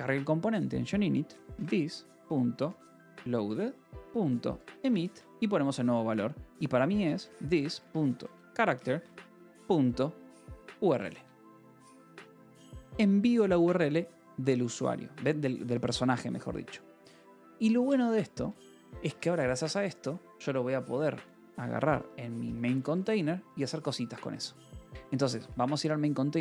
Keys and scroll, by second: 0.9-5.5 typing, 3.4 Return, 6.6-10.9 typing, 11.1 Escape, 12.2 ctrl+s, 18.9 j, 19.6 k, 19.9 =, 21.6-24.9 typing, 24.5 Return.